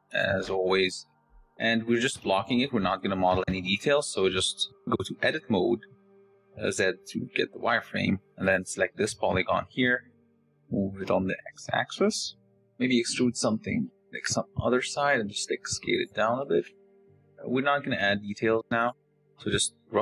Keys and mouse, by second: 1.2 s, 1.3 s, 1.9 g, 2.6 s, 3.4 shift+click, 4.4 shift+click, 5.0 Tab, 7.0 z, 8.8 click, 10.1 g, 13.7 d, 14.9 e, 15.7 s, 16.5 g, 19.0 click, 19.7 click.